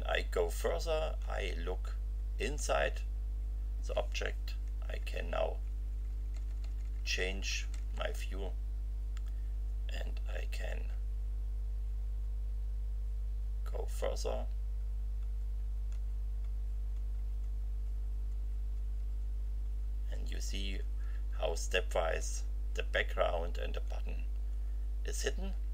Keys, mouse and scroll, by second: 0.4 F5, 4.8 Right, 10.9 F5, 12.0 F5, 13.2 F5, 14.0 F5, 21.5 F5, 23.8 F5, 25.5 F5.